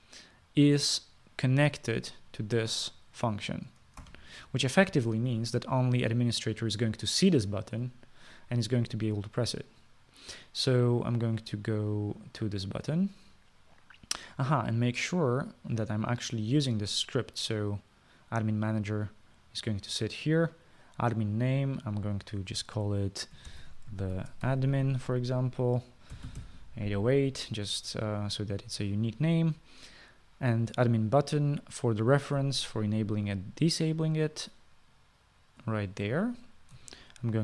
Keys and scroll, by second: 5.3 ctrl+s, 24.6-26.1 typing, 27.4 typing.